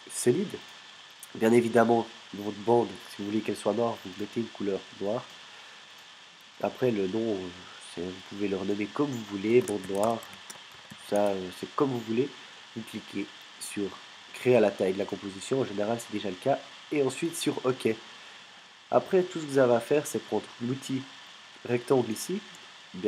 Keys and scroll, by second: 9.3-11.7 typing.